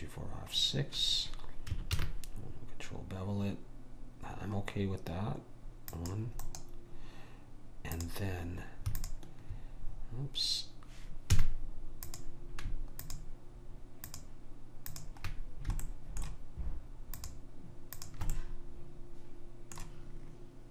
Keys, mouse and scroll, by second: 2.0 ctrl+b, 6.4-8.5 right drag, 8.0-10.9 drag, 10.8-12.1 middle drag, 11.5 a, 12.1-16.9 drag, 15.9-19.7 middle drag, 15.9 right click, 17.3 click, 17.3-19.5 right drag, 20.0 middle click.